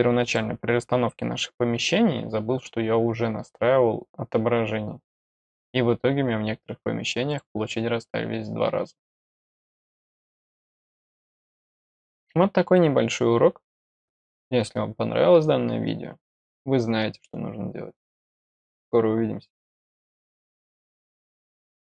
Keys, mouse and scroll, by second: 0.2 click, 7.2 click, 10.9 middle click, 11.3 scroll down 1.